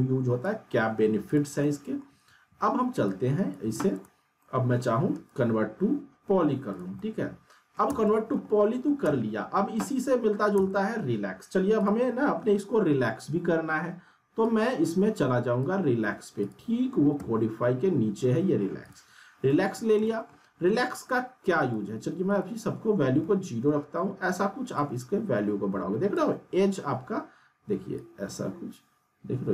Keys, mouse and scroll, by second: 1.9 middle drag, 2.0 scroll down 2, 3.0-3.7 click, 3.6 z, 4.0 alt+scroll down 1, 4.4-5.0 alt+middle click, 5.2 right click, 6.7 click, 7.0-7.9 alt+middle click, 7.8 z, 8.0 middle click, 8.5 scroll down 1, 8.6 alt+middle click, 9.0 z, 9.3-9.8 scroll down 1, 10.3 scroll up 1, 10.5 z, 10.7 alt+middle click, 11.8 click, 13.3 r, 14.4-15.6 drag, 17.1 q, 18.8 click, 19.5-20.3 alt+middle click, 19.9 scroll down 1, 20.0 alt+middle click, 21.6 right click, 23.7 middle click, 24.7-26.3 drag.